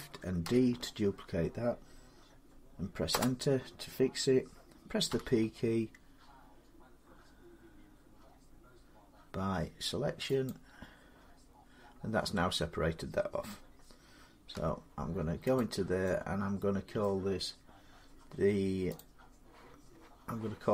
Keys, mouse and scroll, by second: 0.2 shift+d, 2.9 Return, 4.9 p, 10.3 click, 11.5 middle click, 11.6 middle click, 14.3 Tab, 15.4 click, 16.8 middle click, 18.8 click.